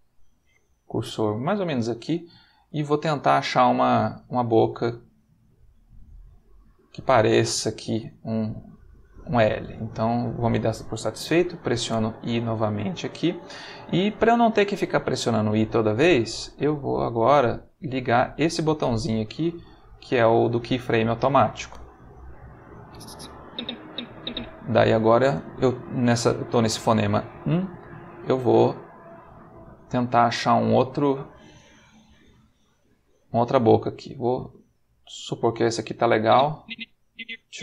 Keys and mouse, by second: 0.9 Right, 2.6-6.7 drag, 11.8 i, 19.6 click, 22.8-24.4 drag, 28.5-32.2 drag, 36.2-37.6 drag.